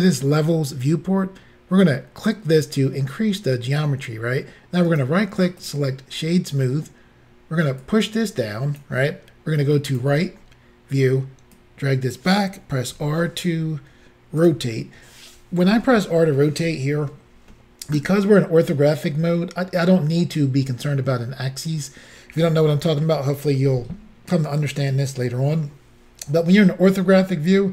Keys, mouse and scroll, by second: 2.2 click, 4.9 right click, 5.6 click, 7.8 click, 9.9 click, 11.6 click, 12.9 r.